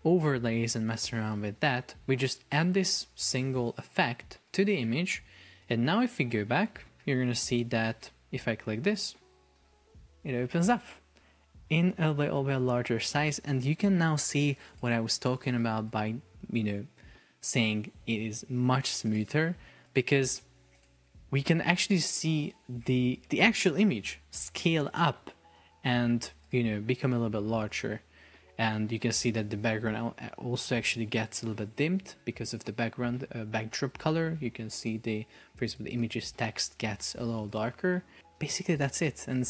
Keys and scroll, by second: 7.1 super+p.